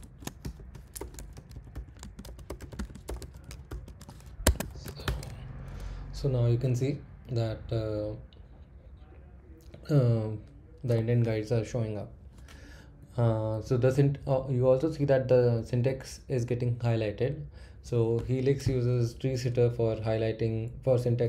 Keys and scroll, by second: 0.0-3.1 typing, 4.4 Escape, 4.5-5.3 typing, 13.0 Up, 13.6 Down, 15.6 Up, 17.8 Down.